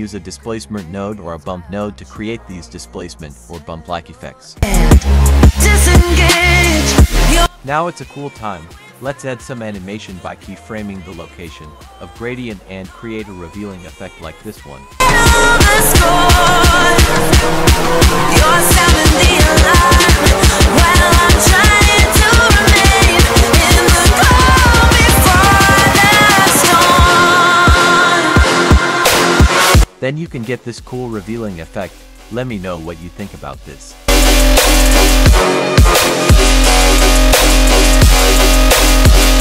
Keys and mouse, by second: 1.7-5.7 drag, 7.2 click, 7.7-10.2 drag, 11.0 click, 11.6 right click, 12.7 click, 28.7 space.